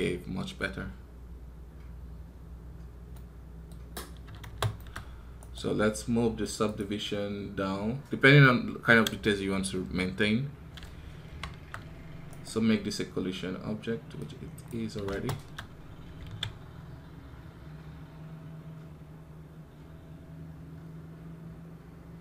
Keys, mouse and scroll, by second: 5.2 right click, 12.2 right click.